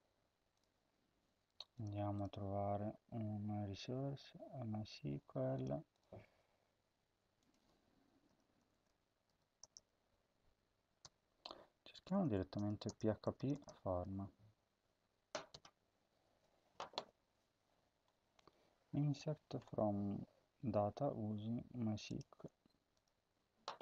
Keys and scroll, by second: 7.9-9.6 typing, 10.8-14.0 typing, 15.3 Return.